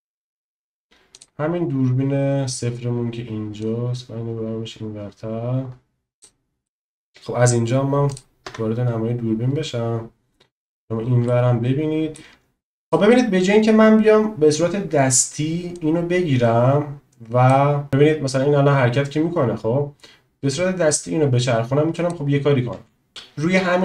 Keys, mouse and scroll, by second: 1.1 click, 3.6 click, 6.8 middle click, 8.5 KP_0, 11.4 shift+middle click, 12.8 click, 15.9 click, 23.0 ctrl+z.